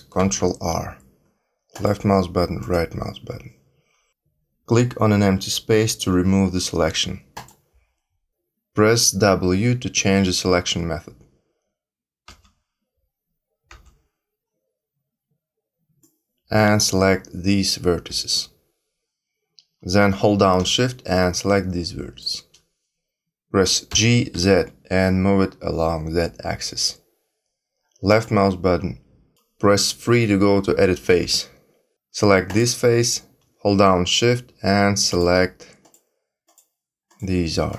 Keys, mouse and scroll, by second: 0.1 ctrl+r, 7.3 click, 12.2 w, 13.7 w, 16.0 click, 21.1 shift+click, 23.9 g, 31.0 3, 32.4 click, 35.0 shift+click, 35.8 shift+click, 36.4 shift+click, 37.0 shift+click, 37.6 shift+click.